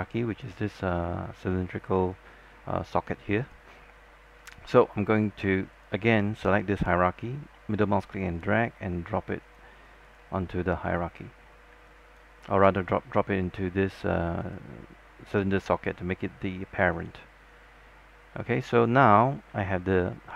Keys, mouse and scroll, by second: 2.4 alt+click, 5.9 click, 7.7-9.1 middle drag, 9.6 click, 11.6 scroll down 1, 12.1 alt+click, 12.5 scroll up 1, 12.8-18.2 alt+drag, 18.5-18.9 scroll down 1, 18.9 click, 20.0 alt+middle click.